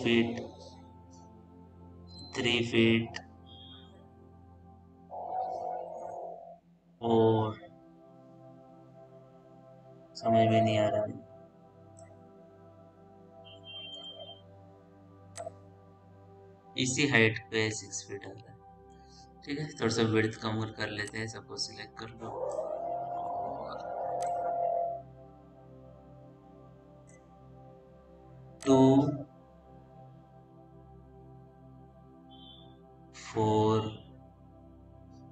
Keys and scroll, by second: 23.3 r.